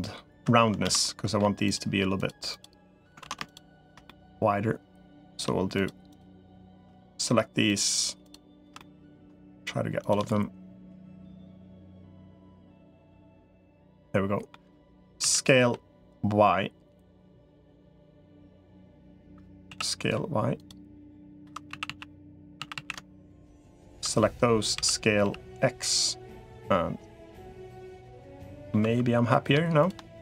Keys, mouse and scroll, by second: 0.7 ctrl+z, 0.8 middle click, 2.3 shift+click, 3.1 ctrl+z, 3.9-5.2 middle drag, 5.9 click, 6.8 middle click, 7.7 shift+click, 8.6 middle click, 10.1 middle click, 11.3 middle click, 13.3 shift+click, 13.7 middle click, 14.5 middle click, 15.1 s, 17.9-19.1 middle drag, 19.5 s, 20.8 middle click, 21.3 2, 21.5 a, 21.7 a, 22.5 a, 23.5 alt+shift+click, 24.5 s, 28.1 middle click, 28.7 2, 29.1 click.